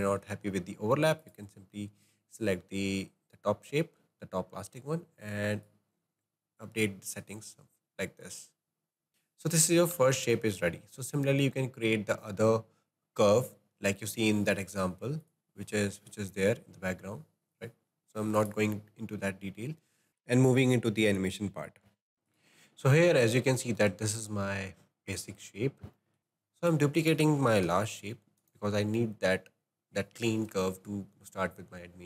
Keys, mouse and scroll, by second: 1.3 click, 5.7-9.1 drag, 10.5-14.0 shift+middle drag.